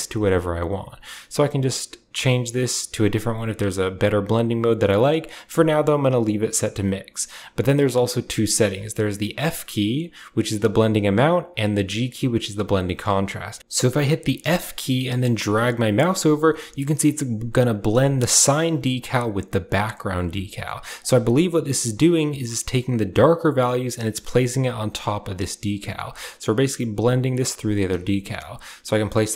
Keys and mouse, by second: 13.6-29.3 drag.